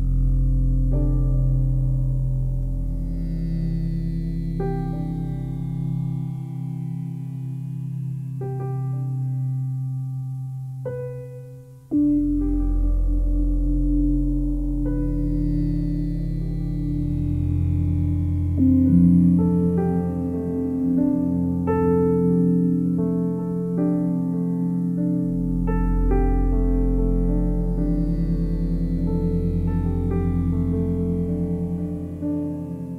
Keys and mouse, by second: 0.0-2.7 typing, 4.2 click, 5.5 click, 8.8 click, 8.9 click, 10.5-13.1 typing, 13.2 Return, 14.5-16.1 drag, 15.8-16.6 typing, 16.7-17.8 drag, 17.8 typing, 19.0-19.4 typing, 19.8 Return, 21.1 click, 22.2 click, 23.6 click, 26.9 ctrl+s, 29.4 1, 30.5 click.